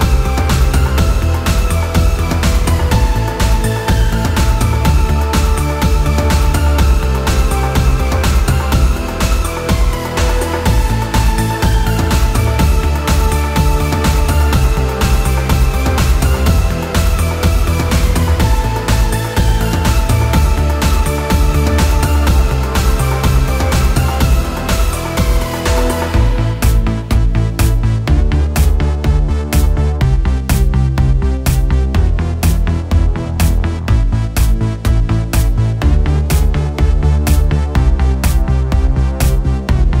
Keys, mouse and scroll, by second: 2.8-6.5 drag, 8.6 click, 9.6-10.7 middle drag, 10.7-11.3 scroll up 5, 11.3-12.1 middle drag, 12.1 scroll up 1, 12.3-12.8 scroll down 4, 12.8-15.3 middle drag, 15.3 click, 15.9-17.3 scroll down 4, 17.3 l, 17.8 click, 18.6 click, 19.8-21.2 middle drag, 21.2 scroll up 4, 22.1-22.9 scroll up 8, 23.2-24.5 scroll down 14, 24.5-25.4 scroll up 4, 26.8-29.9 drag, 33.7-37.1 drag, 37.9-40.0 drag.